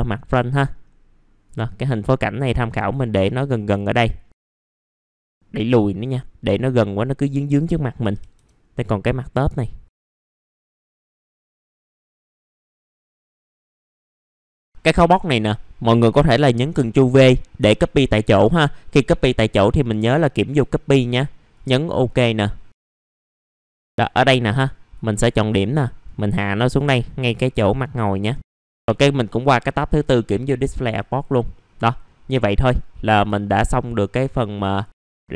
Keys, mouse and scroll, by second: 0.2 middle click, 0.7-1.4 scroll down 1, 1.4-3.9 drag, 3.9-4.3 scroll up 1, 4.3 alt+middle click, 4.8 middle click, 4.9 scroll down 1, 5.0 click, 5.1 alt+middle click, 6.0 click, 6.8 middle click, 7.2 click, 7.7 middle click, 8.6 scroll down 1, 9.1 middle click, 9.8 click, 10.0 scroll up 1, 10.3 click, 11.1 scroll down 1, 11.2 alt+middle click, 11.4 alt+middle click, 11.6 click, 12.1 F7, 12.5 alt+middle click, 13.2 click, 13.6 alt+middle click, 13.7 click, 13.8 alt+middle click, 14.0 click, 14.0 alt+middle click, 14.2 alt+middle click, 14.4-14.8 scroll up 2, 14.5 click, 15.1 middle click, 20.4 click, 22.2 middle click, 22.7 click, 22.9 middle click, 23.9-24.4 scroll down 1, 24.6 click, 25.1-26.0 scroll up 1, 26.0-28.2 drag, 28.2 1, 28.5 alt+middle click, 28.9 click, 30.3 middle click, 30.4 scroll down 1, 30.7 alt+middle click, 31.1 click, 31.5 middle click, 31.6-32.0 scroll down 1, 32.0-32.7 scroll up 1, 32.7 click, 33.3 alt+middle click, 34.7 click, 35.0 middle click, 35.2 alt+middle click.